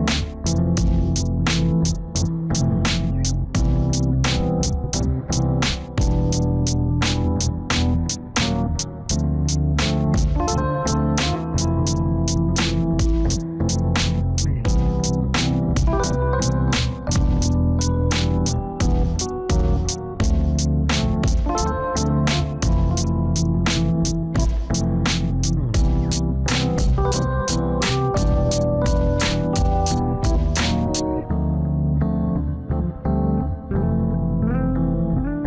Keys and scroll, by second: 18.7 F4, 27.1 F4, 34.4 F4.